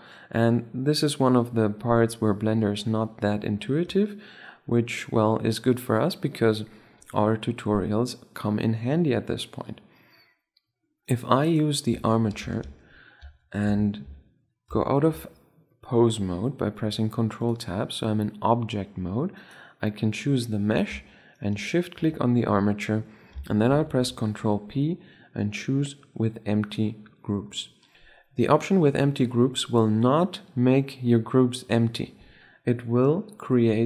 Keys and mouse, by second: 10.9-12.2 right drag, 11.6 Tab, 12.2 a, 12.4 a, 13.0 Tab, 14.4 ctrl+Tab, 17.1 click, 18.0 click, 18.5-18.9 drag, 19.1-20.8 right drag, 21.1-22.8 right drag, 23.4 ctrl+p.